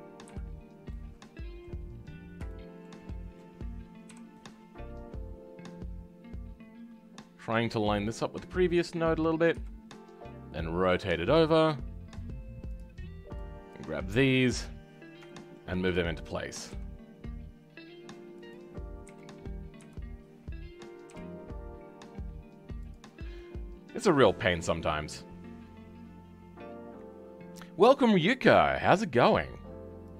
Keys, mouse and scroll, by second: 0.2 KP_Decimal, 0.8-2.0 middle drag, 2.0-2.4 scroll down 5, 2.4-4.0 shift+middle drag, 4.0 KP_5, 4.3-14.6 middle drag, 14.9-15.2 scroll down 4, 15.2-16.6 shift+middle drag, 16.6 g, 19.7 KP_3, 21.1 g, 23.1 scroll down 3, 23.3-24.3 middle drag, 24.3 scroll up 2.